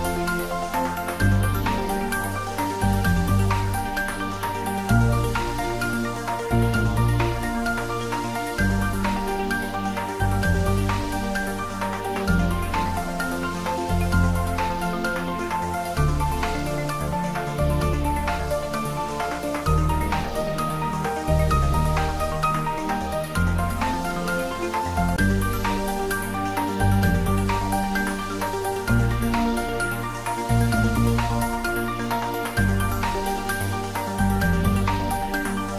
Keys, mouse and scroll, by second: 0.4 scroll down 1, 1.2 middle click, 2.0 scroll down 1, 2.6 middle click, 2.9-4.0 scroll down 1.